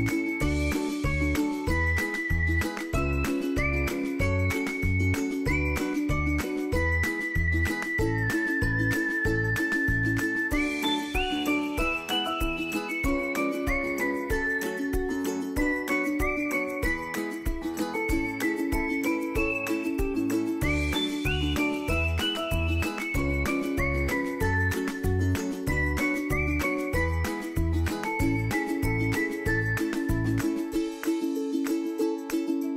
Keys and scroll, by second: 5.7 ctrl+d, 11.2 ctrl+d, 24.0 ctrl+a.